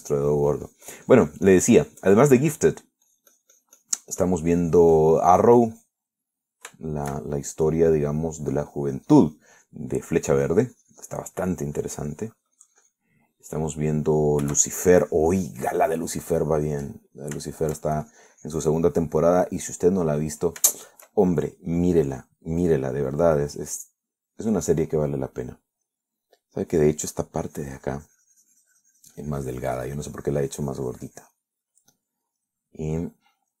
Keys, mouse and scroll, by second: 1.0-3.7 drag, 3.8 middle click, 4.3-7.3 drag, 7.4 middle click, 8.0 shift+middle click, 8.9-10.8 shift+drag, 10.9 middle click, 11.7-14.4 drag, 14.4 middle click, 15.3 middle click, 16.1-18.1 shift+drag, 18.2-19.3 middle drag, 19.3 shift+click, 20.2 middle click, 22.0 shift+middle click, 27.1-28.2 middle drag, 28.6-32.8 drag, 32.8 middle click, 33.5 middle click.